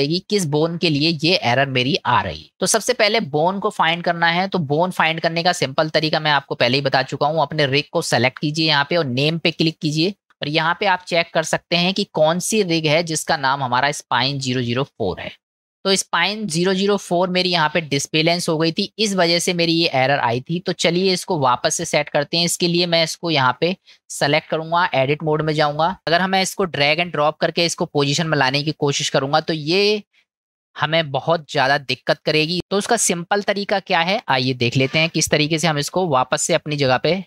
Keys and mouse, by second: 2.5-3.3 middle drag, 6.1-6.4 middle drag, 7.2 click, 9.6 click, 11.1-12.0 middle drag, 16.0 click, 18.0-20.0 middle drag, 24.6-25.7 drag, 29.0-32.2 middle drag.